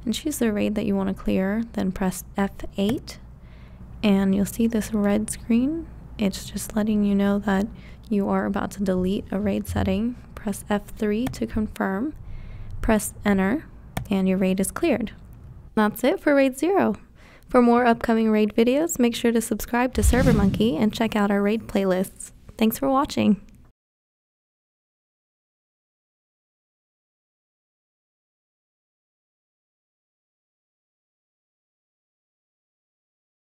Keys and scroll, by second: 2.7 F8, 11.0 F3, 13.8 Return.